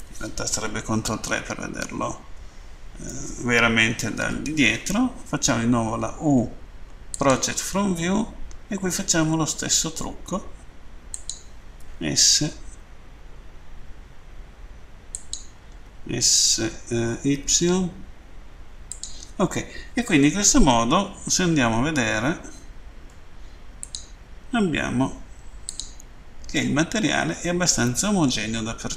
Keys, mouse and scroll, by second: 0.8 ctrl+Page_Down, 7.1 click, 11.2 click, 15.2 click, 15.7 s, 18.9 click, 23.8 click, 25.7 click, 26.5 middle click.